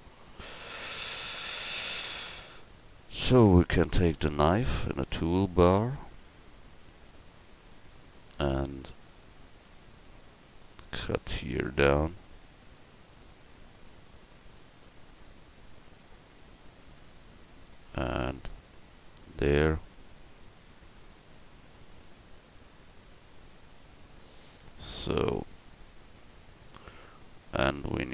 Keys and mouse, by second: 25.6 ctrl+r.